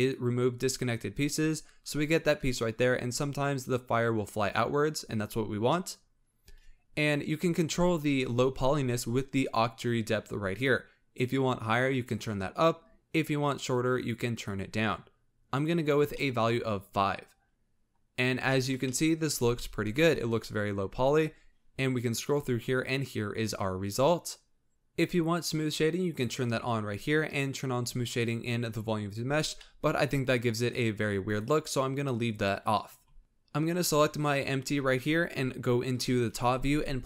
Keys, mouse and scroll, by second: 3.4-5.5 scroll down 1, 5.5-6.3 scroll down 1, 8.4-8.7 scroll up 3, 11.1-13.5 drag, 13.9-15.9 drag, 15.9 scroll down 3, 16.1-18.0 middle drag, 18.0-18.4 scroll up 2, 18.4-21.1 shift+middle drag, 21.1-24.1 drag, 24.7 click, 26.0 click, 27.2 click, 29.3 scroll up 3, 29.6-30.4 middle drag, 30.4 scroll down 1, 31.1 click, 32.2 click, 33.2 shift+click, 35.8 KP_7, 36.9 g.